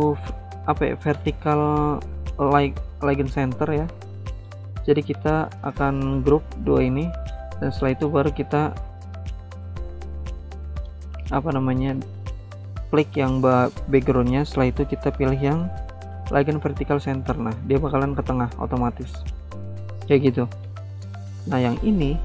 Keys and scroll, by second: 6.4 ctrl+g.